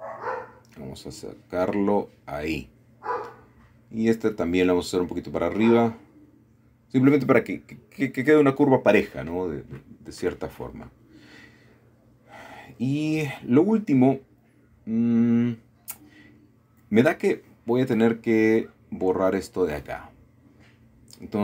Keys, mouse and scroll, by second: 2.9 click, 3.8 click, 4.8 g, 5.5 click, 7.1 KP_1, 8.2 g, 10.5 click, 11.0 shift+middle click, 12.3 middle click, 13.7 middle click, 14.0-14.7 scroll up 1, 15.0 shift+middle click, 17.2 middle click, 17.9 shift+middle click, 19.0 middle click, 20.5 typing.